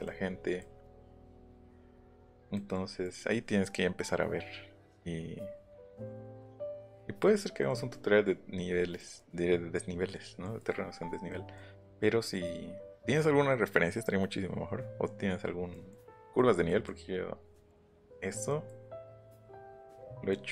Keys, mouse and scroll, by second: 0.0 middle click, 1.0 middle click, 1.1 middle click, 7.6 middle click, 7.9 middle click, 8.7 middle click, 8.9 middle click, 10.4 middle click, 10.9 scroll up 1, 11.3 middle click, 15.6 middle click, 15.7 middle click, 16.2 middle click, 17.6 middle click, 18.4 middle click, 19.1 middle click.